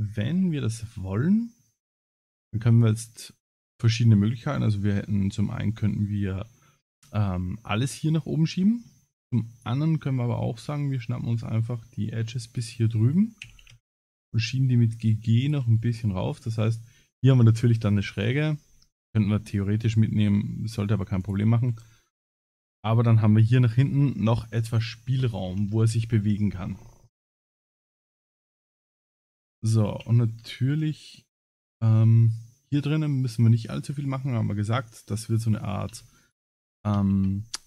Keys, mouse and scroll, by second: 0.7 middle click, 1.4 middle click, 2.0 click, 2.9 middle click, 7.0 middle click, 8.6 middle click, 9.5 click, 10.3 middle click, 12.5 ctrl+click, 13.4 g, 15.7 middle click, 19.6 middle click, 21.2 click, 21.6 scroll down 2, 22.3 middle click, 25.3 ctrl+s, 25.9 middle click, 27.4 scroll down 2, 28.0 scroll up 2, 29.4 click, 29.9 ctrl+s, 30.5 middle click, 33.7 shift+middle click, 34.3 scroll up 3, 35.3 click, 35.3 scroll up 1, 35.9 Tab, 36.2 click, 37.0 ctrl+s.